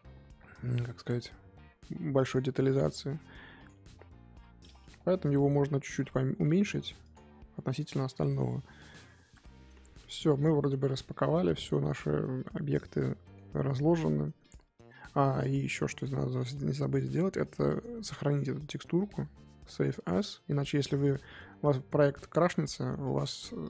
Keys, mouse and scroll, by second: 1.2 s, 2.7 click, 4.3 l, 5.4 g, 7.7 click, 12.8-14.4 middle drag, 14.4 click, 16.3 click, 20.1-23.6 drag.